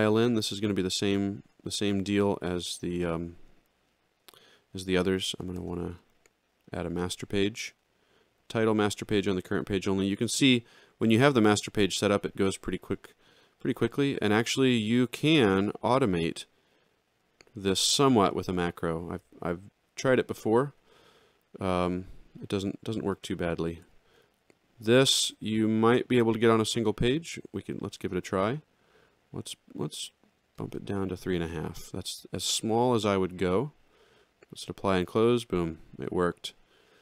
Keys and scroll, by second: 19.8 alt+shift+], 23.8 ctrl+-, 25.6 ctrl+=, 27.1 ctrl+shift+l.